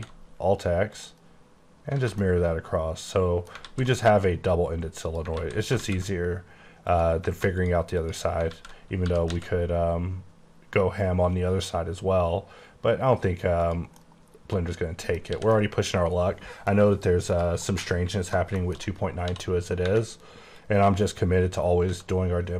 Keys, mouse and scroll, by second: 0.0 x, 1.0 click, 2.0 a, 2.3 middle click, 3.8 alt+z, 5.1 click, 5.4 alt+z, 5.9 alt+z, 7.0 click, 7.7 click, 8.5 click, 8.5 alt+z, 9.1-9.4 typing, 13.7 click, 14.1 middle click, 14.7 middle click, 15.3 middle click, 15.4 h, 15.6 middle click, 16.9 scroll up 2, 17.4 click, 17.7 middle click, 18.6 shift+middle click, 18.9 shift+scroll up 2, 19.2 d, 20.7 click, 22.0 x.